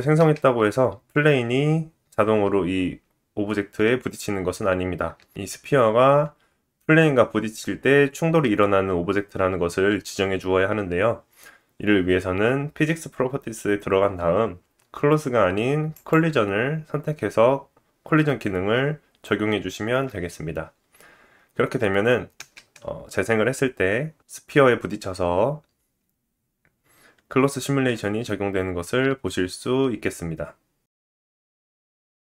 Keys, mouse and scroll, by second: 0.1 space, 5.1-6.3 drag, 5.1 space, 6.5 shift+middle click, 15.9 click, 22.4 space, 25.9 shift+middle click, 26.7 scroll up 2, 26.8-32.2 drag.